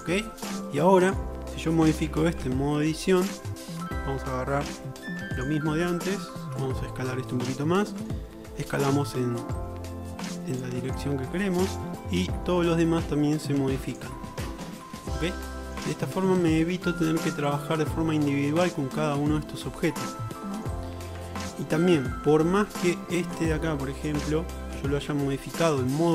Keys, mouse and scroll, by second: 2.2 Tab, 4.8 3, 5.4 ctrl+alt+click, 6.5 ctrl+KP_Add, 8.9 s, 14.0 click, 14.5 shift+middle click, 15.4 middle click, 15.6 middle click, 15.9-17.6 shift+middle drag, 21.2 Tab, 21.2-21.6 drag, 21.6-24.2 middle drag, 26.0-26.1 drag, 26.0-26.1 middle drag, 26.0-26.1 right drag.